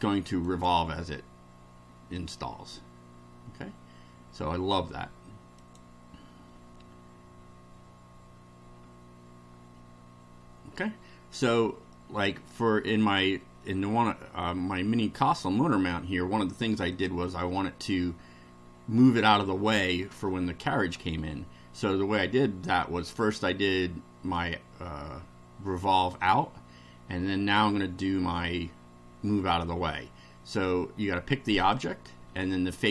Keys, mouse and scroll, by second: 0.4 click, 5.6 click, 11.9 middle click, 16.9 click, 31.7 click, 32.8 ctrl+click.